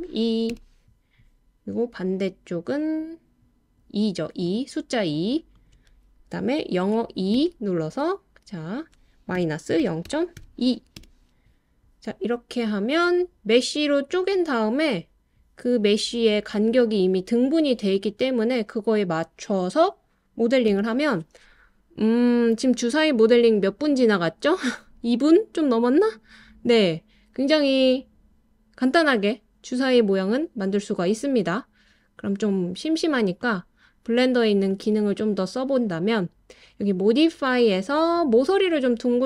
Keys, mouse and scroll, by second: 0.5 Return, 4.5 click, 5.6 shift+click, 7.4 e, 9.4 -, 9.8 0, 10.1 ., 10.4 2, 11.0 Return, 20.7 Tab, 33.4 click, 36.8 click, 38.2-39.2 drag.